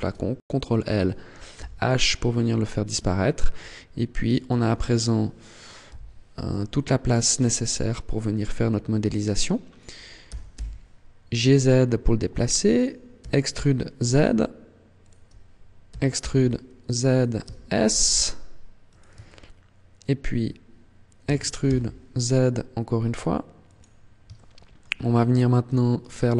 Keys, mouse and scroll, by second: 1.4 h, 1.9-2.6 scroll up 1, 2.6 scroll up 2, 4.3 alt+right click, 5.7 n, 6.4 shift+middle click, 7.4 t, 10.0 g, 12.7 click, 13.0 e, 14.9 click, 15.8 e, 17.2 s, 18.8 click, 19.0 shift+middle click, 21.2 e, 23.6 click, 24.1 shift+middle click, 25.9 alt+right click.